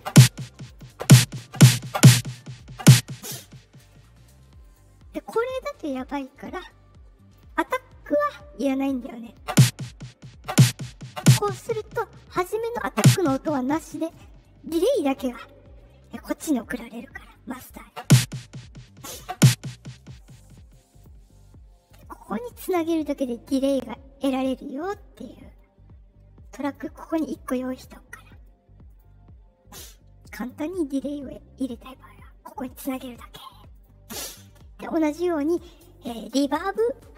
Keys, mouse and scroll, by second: 0.6 click, 4.6 click, 6.2-7.3 drag, 20.6-20.9 drag, 21.8 click, 23.1 click, 24.8 click, 26.6 click, 28.8 click, 30.3 click, 33.7 click, 35.3 click.